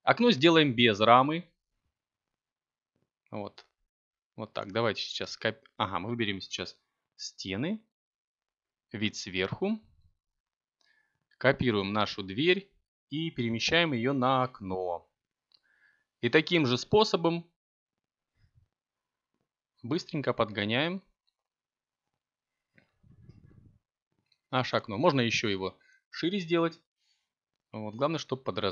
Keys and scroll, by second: 5.0 z, 17.5 Tab, 20.5 v, 22.0 b.